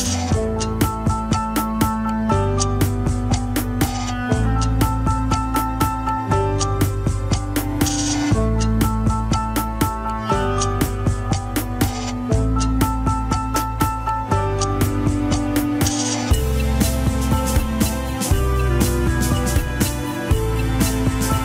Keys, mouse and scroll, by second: 0.2 scroll down 2, 0.4 shift+middle click, 0.9 g, 1.4 shift+z, 1.7 scroll up 3, 1.9 alt+z, 2.3-3.5 scroll down 1, 3.7 s, 6.4 middle click, 6.9 scroll down 2, 7.5 KP_Decimal, 8.0 scroll down 1, 8.2 middle click, 8.6 alt+z, 8.7 scroll up 1, 8.8 middle click, 9.2 alt+z, 9.4 middle click, 9.8 KP_3, 16.2 scroll up 2, 16.5 scroll down 3, 16.7 ctrl+Tab, 17.0 alt+z, 17.2 click, 17.4 scroll up 2, 17.6 Tab, 17.8 click, 18.5 click, 19.0 l, 20.7 Tab, 20.8 click, 21.1 shift+click.